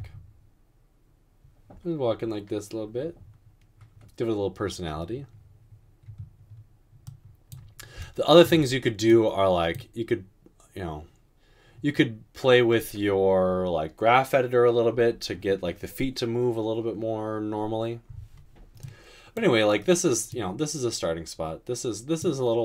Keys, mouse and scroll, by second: 0.0 space.